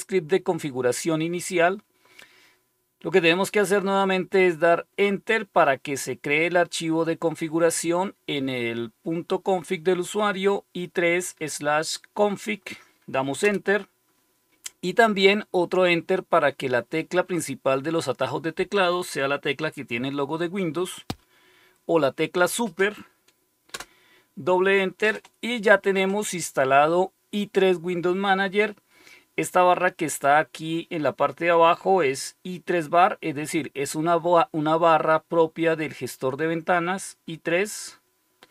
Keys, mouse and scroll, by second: 13.3 Return, 23.7 Return.